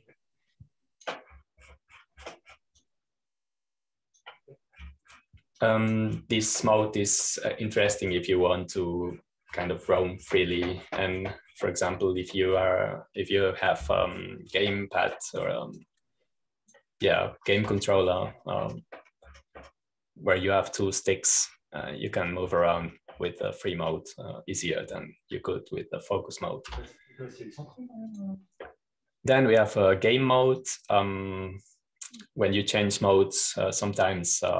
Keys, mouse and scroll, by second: 7.5-13.9 drag, 17.7-22.4 drag, 19.2-22.4 scroll up 1, 23.3-25.8 scroll up 1, 25.8-27.2 drag, 28.6 Home, 30.0 click, 32.5 click.